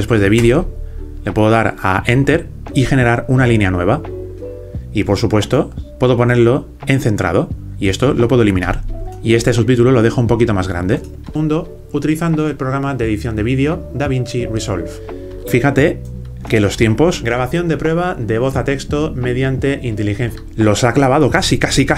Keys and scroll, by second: 0.0-0.4 typing.